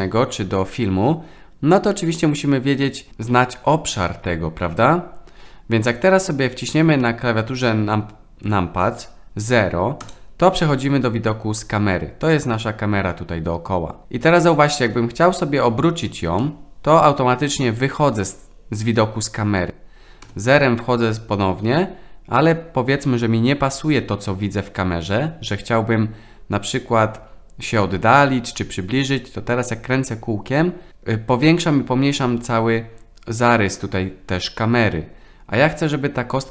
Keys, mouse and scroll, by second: 10.0 KP_0, 16.3-16.9 middle drag, 20.3 KP_0.